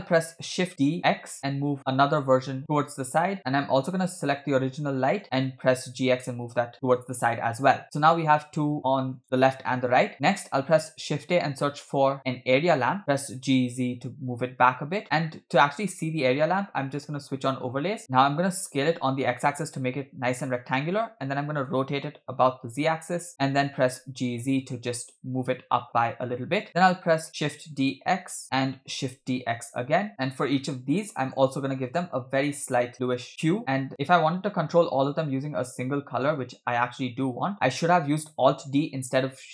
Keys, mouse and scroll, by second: 0.6 shift+d, 4.4 click, 5.1 click, 5.5 g, 10.1 scroll up 2, 10.6 shift+a, 13.2 g, 17.3 click, 18.7 s, 21.6 r, 23.5 g, 27.3 shift+d, 29.0 shift+d, 33.9 click.